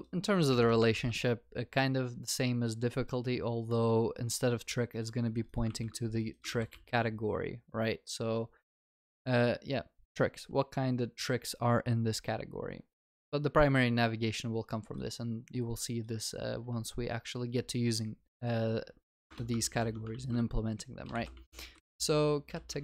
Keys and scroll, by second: 0.5 ctrl+y, 3.5 ctrl+s, 5.7 ctrl+c, 6.5 ctrl+v, 6.7 ctrl+s, 19.3 Return, 19.6 ctrl+s.